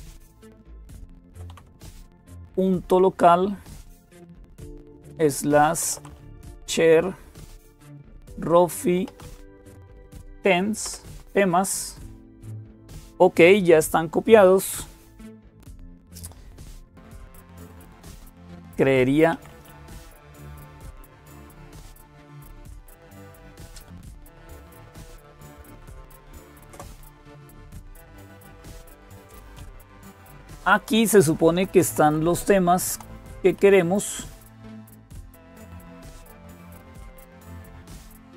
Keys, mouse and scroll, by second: 0.0-38.3 typing, 16.7 click, 24.3 click, 26.5 Return, 28.6 Down, 29.6 Down, 29.7 Down, 29.9 Down, 30.1 Down, 30.4 Down, 30.5 Down, 30.7 Down, 31.0 Down, 31.2 Down, 31.3 Down, 31.5 Down, 31.7 Down, 31.8 Down, 32.2 Down, 32.4 Down, 32.6 Down, 33.1 Up, 33.4 Up, 35.3 Return.